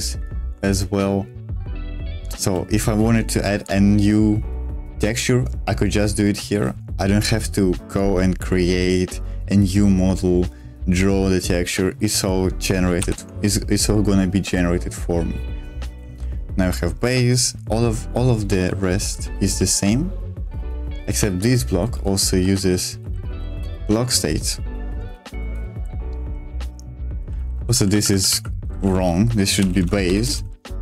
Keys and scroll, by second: 2.4 k, 13.0 ctrl+o, 15.9 j, 16.0 j, 17.3-18.6 j, 18.8 k, 19.1 k, 19.4 k, 20.5-23.7 typing, 25.1 shift+v, 25.5 Escape, 26.8-30.8 typing.